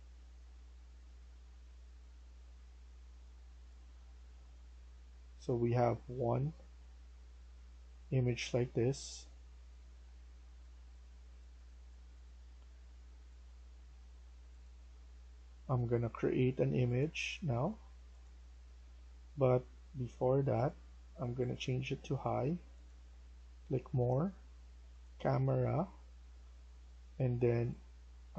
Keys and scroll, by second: 9.8 e.